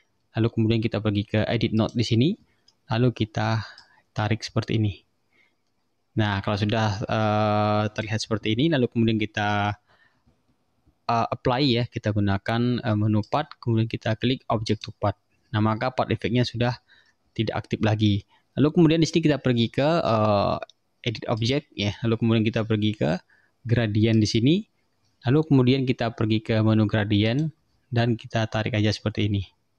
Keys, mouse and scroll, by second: 1.9 click, 3.9-8.3 drag, 9.6 click, 13.3 click, 14.8 click, 21.5 click, 24.2 click, 27.3 click, 29.0-29.7 drag.